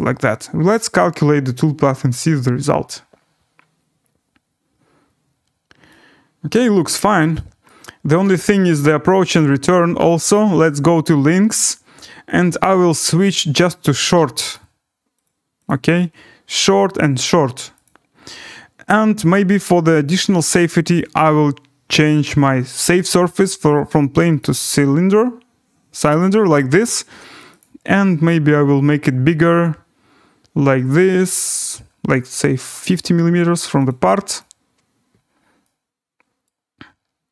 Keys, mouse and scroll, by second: 0.8 click, 7.0 right click, 7.3-7.9 scroll, 8.2 right click, 11.3 click, 12.4 click, 12.9 click, 14.1 click, 14.5 click, 15.2 click, 15.7 click, 16.7 click, 17.8 click, 19.4 click, 21.0 click, 26.8 right click, 27.6 click, 28.0-31.8 scroll, 31.8-32.8 scroll, 33.9 click, 34.4 click, 36.4 right click.